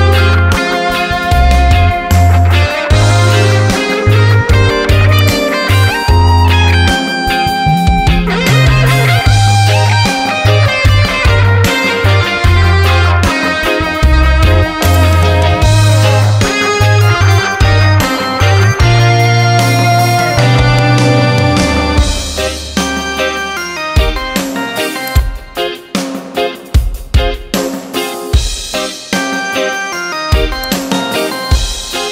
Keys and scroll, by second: 10.8 ctrl+d, 27.8 ctrl+d.